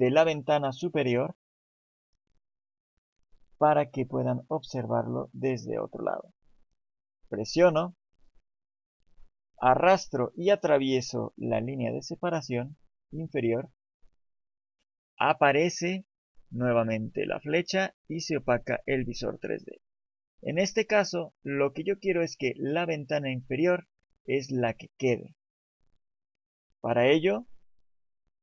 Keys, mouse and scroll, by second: 6.6 click.